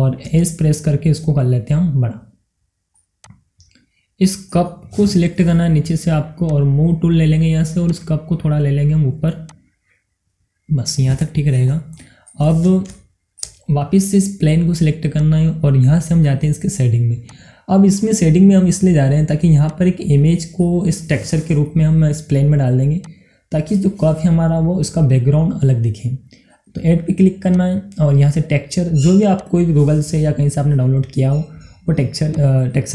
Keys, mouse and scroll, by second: 0.0 middle click, 1.2 s, 3.3 click, 3.6-3.9 scroll down 1, 3.9-6.4 middle drag, 6.4-12.0 drag, 12.0 middle click, 12.7 scroll down 1, 13.0 middle click, 13.4 scroll up 1, 13.9 shift+middle click, 14.7 scroll down 1, 15.1 click, 19.6 click, 20.8-23.1 middle drag, 23.1-26.4 drag, 27.5 click, 32.3 click.